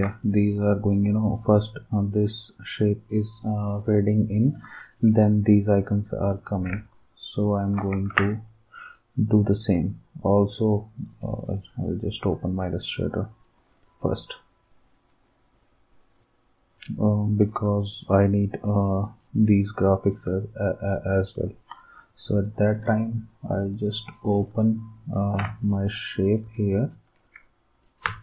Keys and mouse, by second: 7.9 ctrl+s, 28.0 space.